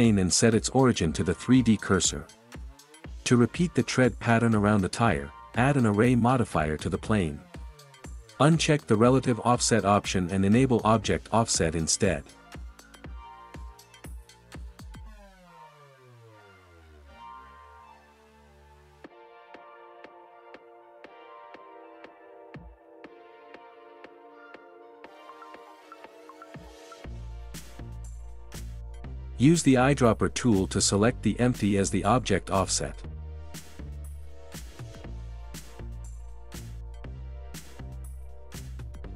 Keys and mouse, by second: 5.3-9.3 right drag, 16.1 right click, 16.4 right click, 17.1 right click, 18.6 middle drag, 25.0 right click, 26.9 middle click, 27.6 middle click, 33.5 middle drag, 36.3 click.